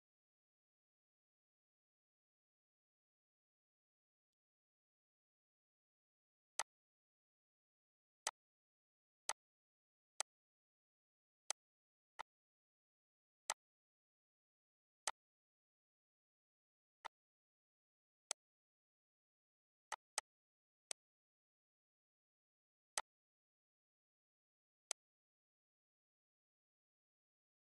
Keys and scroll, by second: 2.6 ctrl+s.